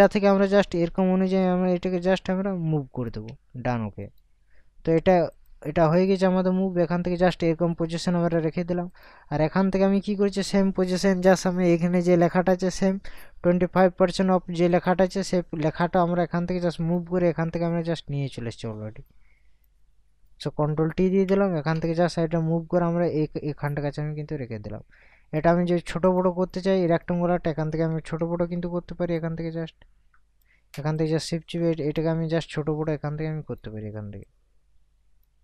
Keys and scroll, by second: 21.1 ctrl+t, 27.9 ctrl+t.